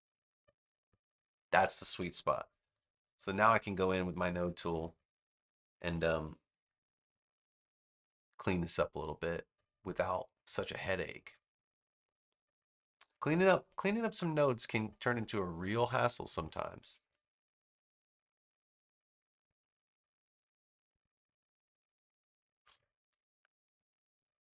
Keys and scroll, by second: 2.6 super+=, 4.2 a.